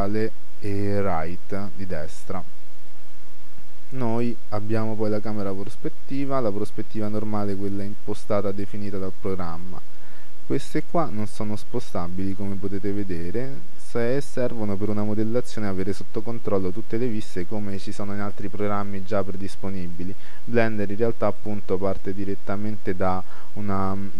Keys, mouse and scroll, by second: 2.0-3.7 middle drag, 5.3-7.2 middle drag, 13.9-14.5 scroll up 1, 14.5-18.9 middle drag, 21.5-23.4 drag.